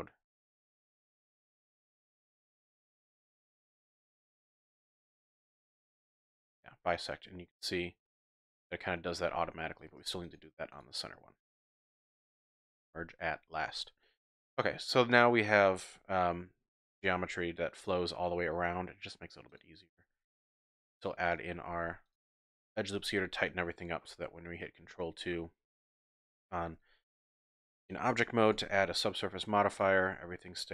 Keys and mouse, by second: 1.7 click, 2.9 click, 3.5 click, 4.0 click, 4.7 click, 5.3 click, 6.3 middle click, 7.5 middle click, 8.9 click, 10.2 shift+click, 12.6 m, 14.1 click, 15.1 click, 16.8 ctrl+r, 19.5 click, 20.1 ctrl+r, 21.2 click, 21.8 ctrl+r, 22.9 click, 23.2 Tab, 24.1 ctrl+2, 25.0-25.5 drag, 25.6 Tab, 26.6 ctrl+r, 28.1 e, 28.5 f, 29.7 click, 30.0 click.